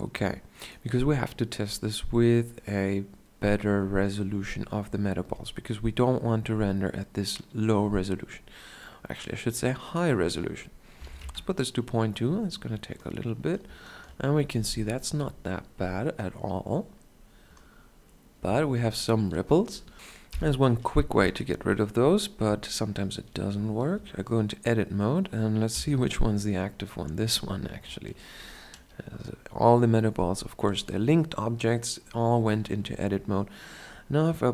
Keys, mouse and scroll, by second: 13.3-15.8 middle drag, 17.3-19.1 middle drag, 22.1 Tab, 23.0-24.3 middle drag, 26.0 KP_Decimal.